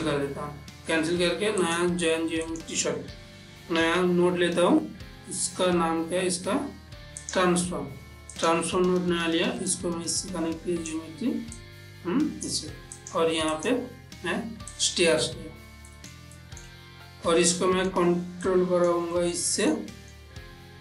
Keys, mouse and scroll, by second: 1.7 click, 2.5 click, 4.0 shift+a, 7.3 click, 8.4-13.1 drag, 16.0 ctrl+middle click, 17.4 middle click, 17.6 ctrl+middle click, 18.5 click, 19.2 ctrl+middle click.